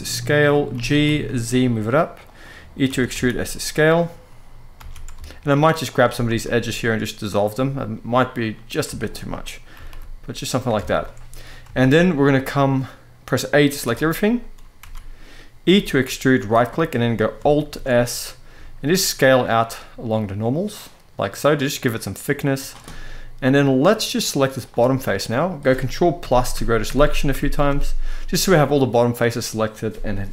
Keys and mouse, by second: 0.1 click, 0.8 g, 0.8 z, 2.0 click, 2.6 e, 2.8 s, 3.5 click, 4.5 alt+a, 5.6 alt+shift+click, 6.0 x, 7.6 middle click, 8.7 alt+shift+click, 9.4 g, 9.7 g, 10.2 click, 10.5 alt+a, 10.7 middle click, 11.5 shift+middle click, 11.9-13.0 middle drag, 13.6 e, 14.6 a, 15.4 e, 16.0 right click, 16.7 middle click, 17.4 alt+s, 22.3 shift+click, 22.5 middle click, 24.3 click, 30.0 KP_1.